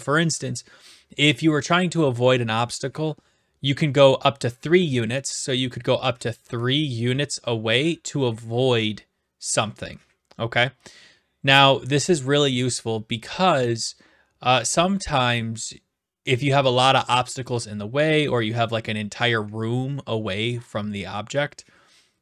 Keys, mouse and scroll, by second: 5.7-6.8 right drag.